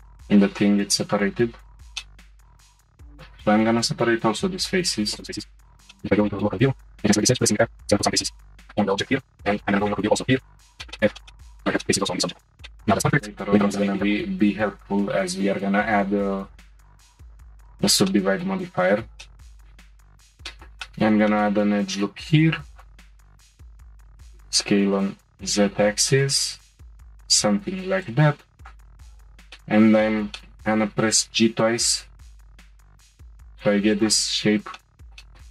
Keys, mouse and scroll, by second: 1.2 Tab, 1.9-2.4 middle drag, 2.4 shift+click, 3.1 shift+click, 3.9 p, 5.7 /, 5.9 shift+middle click, 6.1 scroll up 2, 6.2 shift+middle click, 6.8 2, 6.9 click, 7.3 f, 7.5 f, 7.9 Tab, 8.1 scroll down 1, 8.2-9.0 middle drag, 9.0 /, 9.3 click, 9.7 /, 9.8 middle click, 10.1 scroll up 2, 10.2 shift+middle drag, 10.4 Tab, 10.6 f, 10.8 shift+middle click, 11.5 Tab, 11.6-12.3 shift+middle drag, 12.3 /, 12.4 scroll down 1, 12.6 shift+middle click, 12.7 scroll up 1, 12.9-13.6 shift+middle drag, 13.6 click, 18.0-18.7 shift+middle drag, 18.7-19.2 scroll down 1, 19.2-20.0 shift+middle drag, 20.0 ctrl+r, 20.5-22.7 shift+middle drag, 22.7 click, 23.1 shift+middle click, 23.5 shift+click, 24.1 s, 28.0 click, 28.6 shift+click, 29.2 shift+click, 29.6-31.1 middle drag, 31.1 g, 34.5 scroll down 1, 34.8 middle click.